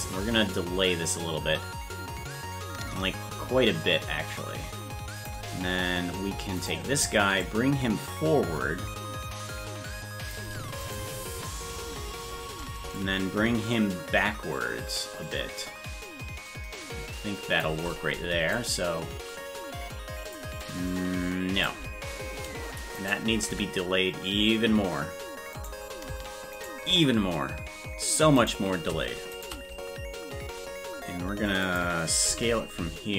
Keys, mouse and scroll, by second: 6.6 right click, 7.4-10.3 shift+drag, 10.9 right click, 12.9-17.6 shift+drag, 18.5-20.3 drag, 20.6-21.6 drag, 22.9 right click, 23.4 g, 26.6 shift+right click, 28.3 right click, 29.3 shift+right click, 31.6 click, 32.2 s.